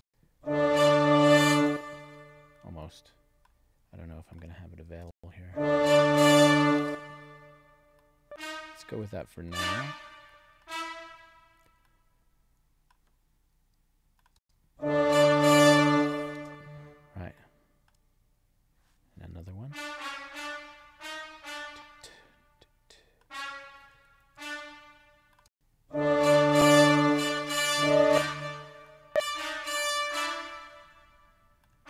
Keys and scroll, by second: 1.5 space, 5.0 space, 6.7 space, 14.3 space, 16.3 space, 24.0 alt+Up, 25.4 space, 27.9 space.